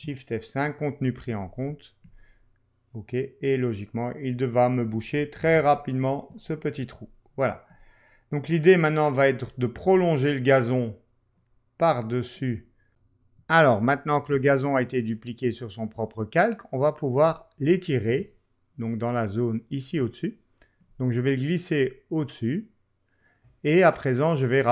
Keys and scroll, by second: 5.4 super+d.